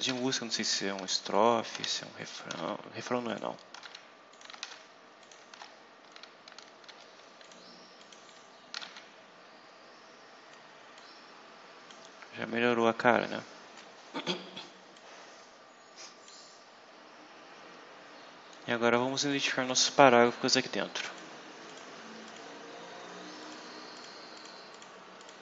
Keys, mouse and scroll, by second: 0.0 ctrl+v, 0.4 ctrl+click, 0.9 ctrl+v, 1.2 ctrl+click, 1.6 ctrl+v, 2.1 ctrl+click, 2.4 ctrl+v, 3.2 ctrl+click, 3.6 ctrl+v, 4.2 ctrl+click, 4.5 ctrl+v, 5.1 click, 5.4 ctrl+v, 6.8 ctrl+z, 8.0 click, 8.6 ctrl+v, 10.9-12.0 drag, 12.2-12.9 scroll down 2, 13.0-13.3 scroll up 2, 14.8-16.4 drag, 16.7-17.8 scroll up 6, 19.1 click, 21.0 click, 21.6 click, 22.2 click, 23.3 click, 23.9 click, 24.3 click, 24.6 click, 25.1 click.